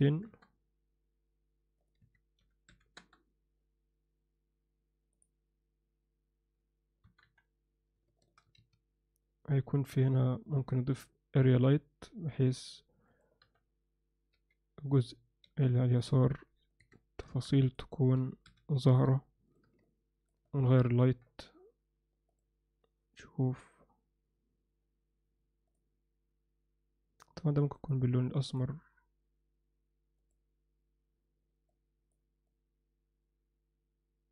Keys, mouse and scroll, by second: 7.0 KP_0, 7.3 KP_1, 8.6 shift+a, 12.5 r, 13.4 KP_7, 14.3 g, 15.5 r, 16.7 click, 17.7-19.0 drag, 19.5 click, 21.1 KP_0, 22.6 click, 27.7 drag.